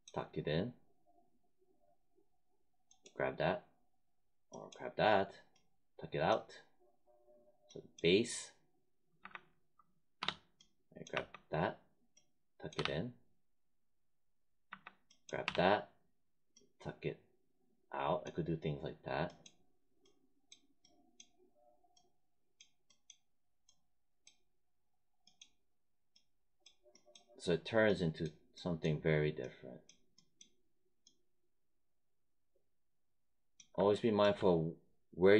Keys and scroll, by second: 9.1 1, 10.1 3, 11.0 1, 12.7 3, 14.6 1, 15.3 3.